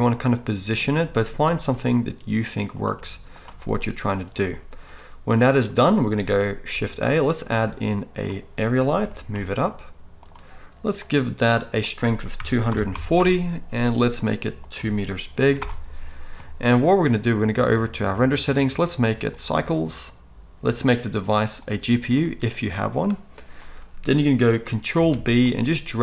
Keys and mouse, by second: 1.0-17.8 right drag, 1.4 g, 2.9 g, 6.7 shift+a, 9.0 g, 11.0 click, 11.9-18.5 drag, 24.9 ctrl+b.